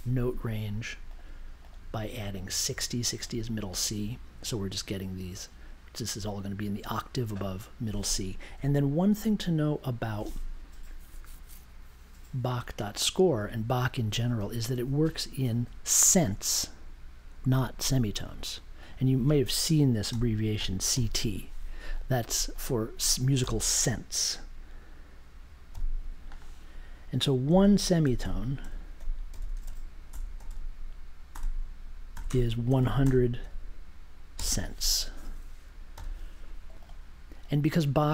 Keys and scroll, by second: 0.6 0, 19.8-21.4 typing, 23.4 BackSpace, 25.7 c, 27.4-33.4 typing, 35.9 super+j.